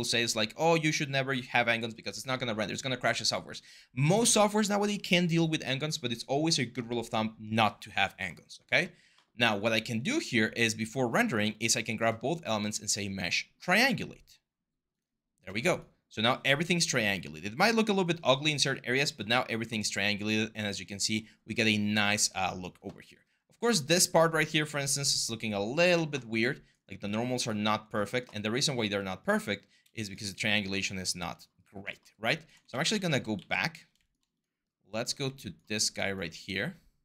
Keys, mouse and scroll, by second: 32.5 ctrl+z, 32.7 ctrl+z, 32.9 ctrl+z.